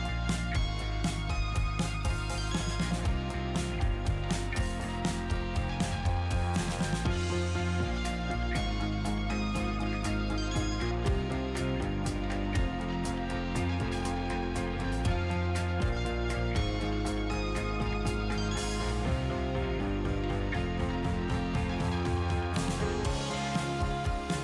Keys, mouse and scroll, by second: 16.6-22.7 drag, 22.7-23.2 scroll down 5, 22.7 middle click, 23.4-24.4 middle drag.